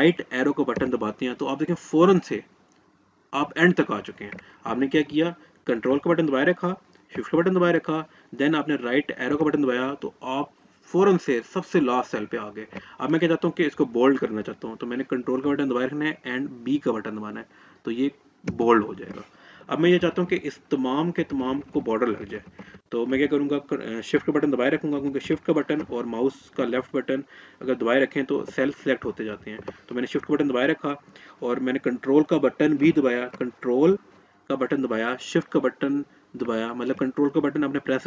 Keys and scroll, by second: 14.5 ctrl+b.